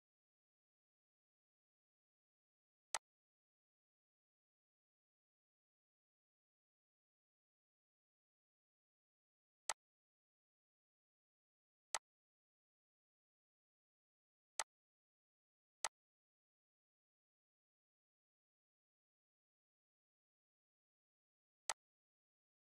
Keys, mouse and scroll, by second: 2.9 click, 9.6 click, 11.9 click, 14.5 click, 21.7 click.